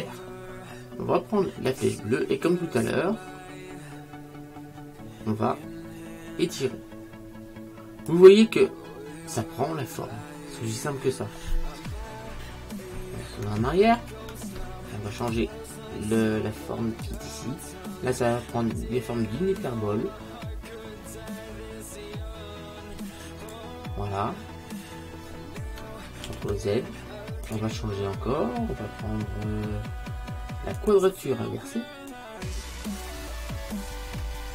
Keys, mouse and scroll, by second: 13.9 ctrl+z, 15.3 click, 18.6 click, 26.3 ctrl+z, 27.5 click, 32.2 click.